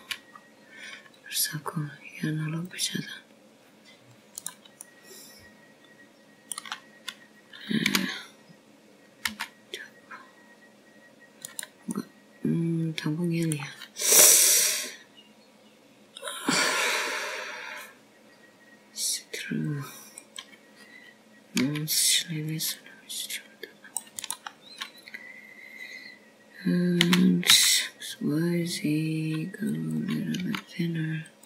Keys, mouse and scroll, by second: 2.8 c, 7.6 middle click, 10.8 g, 14.8 middle click, 22.3 click, 23.1 click, 24.6 c, 29.9 s.